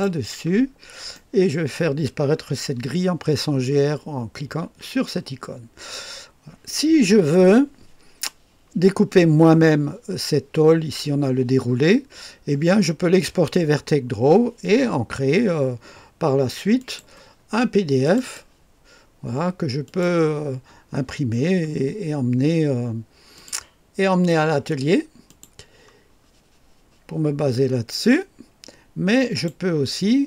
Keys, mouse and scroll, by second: 0.7-1.8 scroll up 1, 1.2-2.4 right drag, 4.2-5.1 typing, 6.8 click, 7.4 right click, 16.8 click, 18.0 click, 18.3 click, 19.9 click, 20.7-21.4 scroll down 2, 21.4-23.3 scroll down 1, 23.3 click, 25.3 click, 29.2 click.